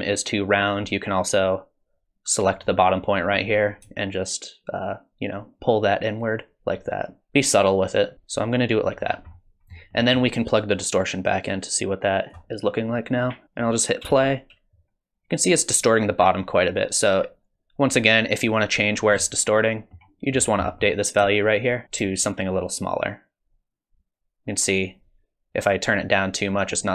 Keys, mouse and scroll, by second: 2.6 click, 4.2 shift+click, 9.1-10.0 scroll down 6, 9.3 middle click, 10.0 middle click, 11.4 click, 14.1 space, 19.2 middle click, 20.3-20.7 scroll up 5, 20.7 middle click, 21.6 shift+click, 22.2 shift+click.